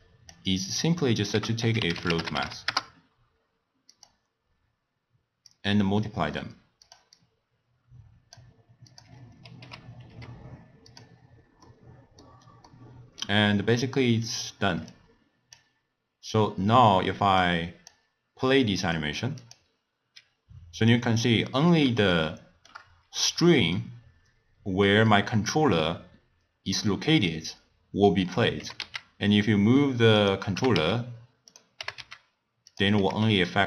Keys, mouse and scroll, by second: 0.7 click, 1.3 ctrl+a, 5.5 click, 6.8 click, 7.2-8.9 drag, 9.6 h, 10.1 g, 11.6 scroll down 1, 11.7-14.9 middle drag, 14.9 click, 17.4-19.6 drag, 22.1 scroll up 1, 22.1-25.2 shift+middle drag, 28.6 g, 30.6 g, 31.8 g, 33.0 g.